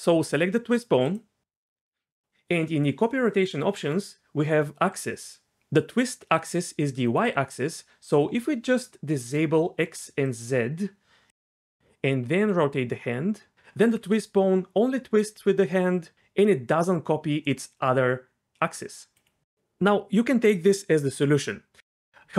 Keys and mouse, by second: 1.1 right click, 6.3 right click, 7.0-9.3 right drag, 10.2 right click, 11.8 r, 12.1 r, 12.2 r, 13.5 r, 13.9 r, 14.0 r, 20.1 shift+click, 20.9 click, 21.4 r.